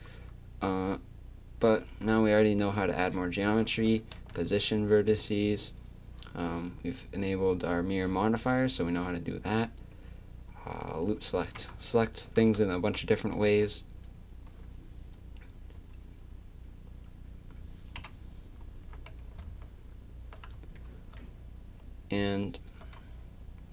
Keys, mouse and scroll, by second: 2.4 Tab, 3.4 a, 3.9 click, 4.2 g, 9.0-12.1 drag, 11.4 a, 12.8 a, 13.4 b, 18.0 KP_3, 22.6-23.7 right drag.